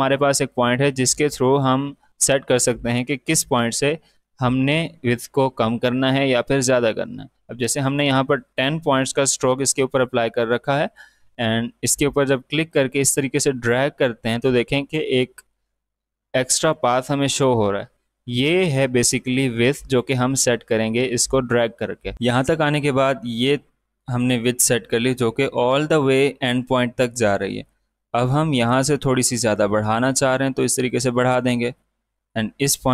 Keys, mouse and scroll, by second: 11.7-21.7 drag, 22.1 ctrl+z, 22.9 space, 23.0 click, 23.4 space, 23.8-24.1 alt+scroll down 2, 24.2 space, 24.4 click, 28.4-32.9 drag.